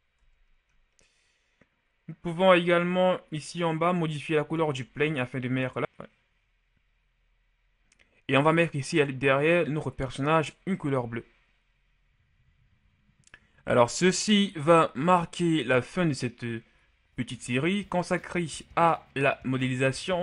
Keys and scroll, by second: 0.0 Tab.